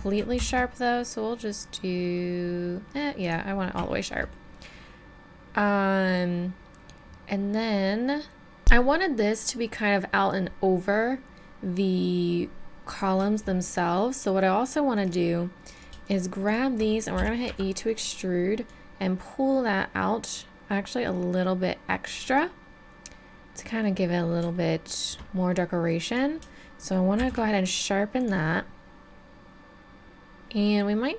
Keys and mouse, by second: 0.4 shift+e, 3.9-4.9 middle drag, 5.1-6.5 middle drag, 6.5 middle click, 6.7 middle click, 6.9 middle click, 7.6 middle click, 8.4 middle click, 9.8-12.9 middle drag, 12.9-14.8 drag, 14.8 middle click, 15.0 click, 17.2-20.6 drag, 17.2 e, 24.2 middle click, 27.2 shift+e, 29.1 middle click, 30.2 middle click.